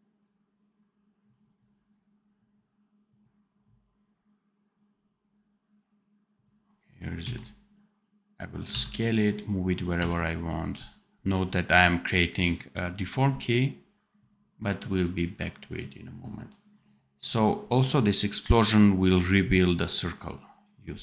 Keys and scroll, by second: 7.1 x, 8.6 v.